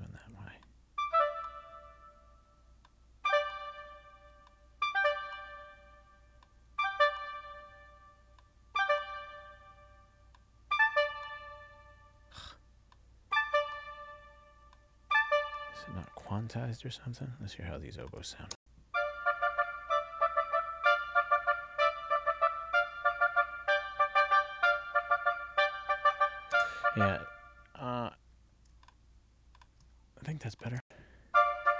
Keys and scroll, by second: 18.6 space, 26.6 space, 30.9 space.